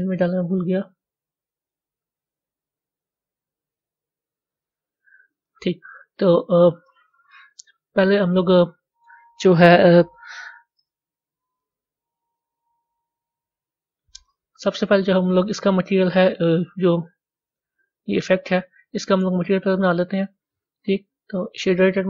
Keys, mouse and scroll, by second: 0.7 click, 2.1 click, 4.2 click, 7.4 click, 15.5 click, 21.2 click.